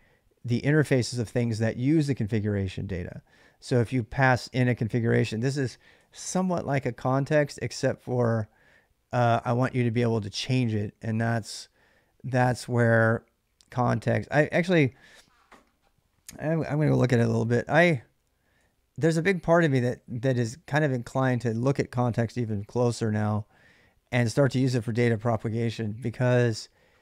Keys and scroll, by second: 16.5 ctrl+a, 16.8-21.0 typing.